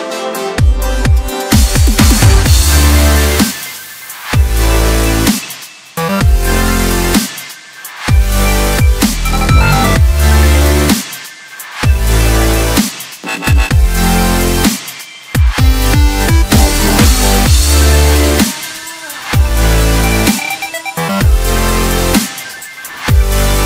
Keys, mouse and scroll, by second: 2.7 scroll down 2, 3.0-4.2 middle drag, 4.2 scroll up 2, 4.6-6.0 middle drag, 6.0 KP_7, 7.2 shift+d, 10.3-13.4 middle drag, 14.7 ctrl+a, 16.1 click, 18.4-20.9 middle drag, 20.9-21.7 scroll up 1, 22.3-23.0 drag.